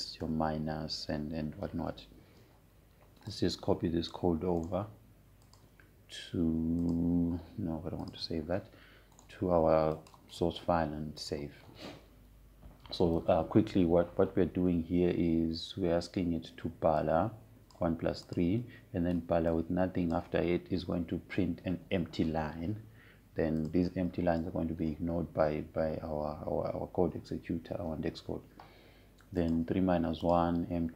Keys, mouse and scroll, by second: 1.3 shift+=, 3.3 BackSpace, 5.0-6.3 drag, 6.3 right click, 7.1 click, 10.8 right click, 11.6 click, 18.7-24.5 drag, 25.2 click.